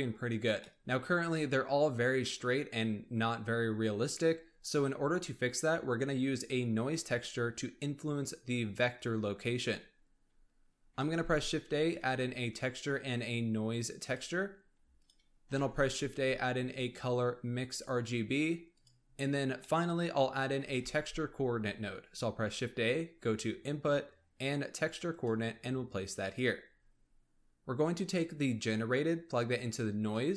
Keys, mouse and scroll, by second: 0.3 scroll down 1, 0.5-3.6 middle drag, 8.2 click, 10.9 shift+a, 15.4 shift+a, 19.5-20.7 middle drag, 20.7 shift+a, 26.6-27.9 scroll up 3, 27.9 scroll up 1, 28.1 click.